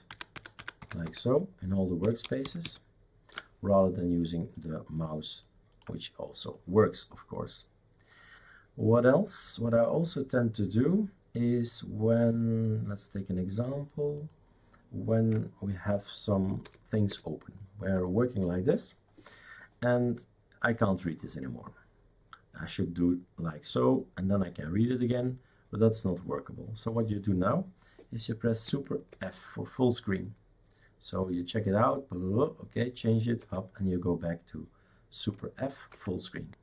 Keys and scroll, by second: 0.1 ctrl+alt+Right, 0.4 ctrl+alt+Right, 0.6 ctrl+alt+Right, 2.0 ctrl+alt+Left, 2.5 ctrl+alt+Left, 2.6 ctrl+alt+Left, 16.6 super+Return, 17.1 super+Return, 29.1 super+f, 33.4 super+f, 35.9 super+f.